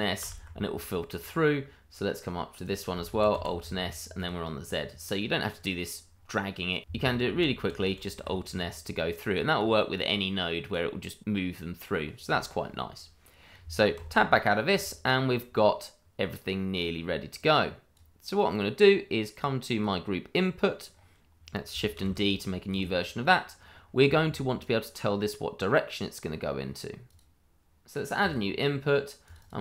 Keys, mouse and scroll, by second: 2.6 click, 3.1 alt+s, 4.1 click, 7.3 alt+s, 9.3 click, 11.9-12.3 scroll down 1, 12.4 shift+middle click, 12.4 middle click, 12.5 shift+middle click, 13.9 Tab, 14.5 scroll down 1, 14.8 shift+middle click, 15.4-16.3 scroll down 1, 16.4 click, 20.9-21.7 scroll up 1, 21.9 shift+d, 22.7 click, 23.7-24.0 scroll up 1, 27.1 click, 29.5 double click.